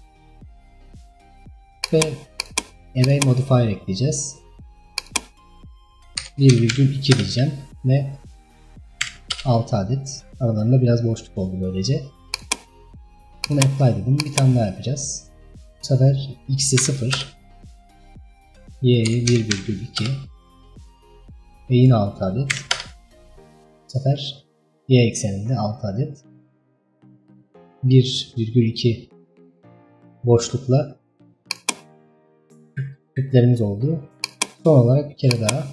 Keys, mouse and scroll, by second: 0.3-0.8 scroll down 2, 2.4-8.0 drag, 8.2-11.4 drag, 12.4-21.6 drag, 22.0-23.4 drag, 23.4-24.4 middle drag, 24.4-25.5 scroll up 2, 27.0-29.3 middle drag, 29.3 scroll down 1, 29.6-30.5 middle drag, 30.5-31.4 scroll up 1, 31.6 click, 32.3 scroll down 3, 32.5-34.3 middle drag, 34.3-35.7 drag.